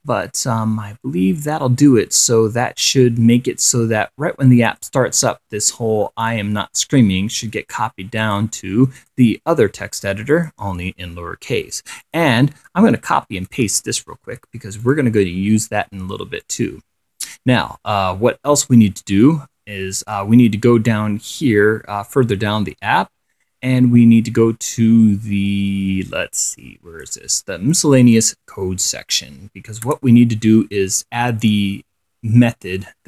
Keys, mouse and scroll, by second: 6.6-8.2 drag, 8.5 click, 9.3 click, 10.6 click, 12.3 click, 13.5 shift+7, 14.5 ctrl+c, 15.1 ctrl+click, 16.7-27.5 drag, 28.0 click, 29.0 1, 30.1 Return.